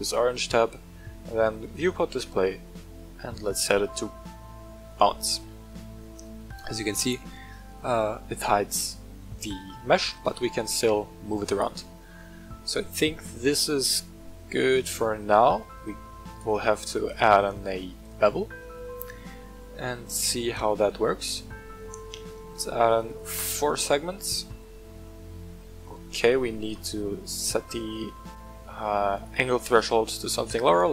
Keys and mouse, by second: 1.6 click, 3.4-5.0 drag, 5.4-10.3 middle drag, 10.7 g, 11.5 right click, 12.0-15.1 middle drag, 16.3 right click, 17.0 click, 18.0-19.5 drag, 19.8-20.2 shift+middle drag, 20.4-20.8 middle drag, 21.1 shift+middle drag, 22.8 click, 24.3-25.8 middle drag, 29.1-30.9 drag.